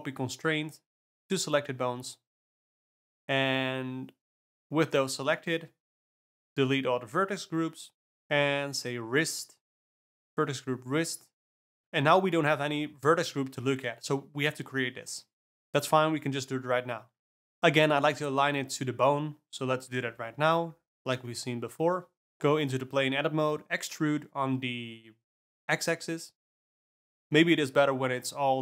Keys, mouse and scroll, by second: 0.3 F3, 2.9 alt+a, 3.2 click, 4.9 click, 6.1 click, 7.3 click, 8.8-13.0 drag, 13.3-14.6 drag, 14.6 r, 15.5 click, 15.6-16.5 ctrl+middle drag, 16.5 click, 17.2 click, 17.8 Tab, 18.1-19.8 middle drag, 19.8 alt+a, 20.1 click, 20.5 shift+s, 21.3 Tab, 21.9 click, 22.3 Tab, 24.1 e, 26.4 shift+s, 27.5 g.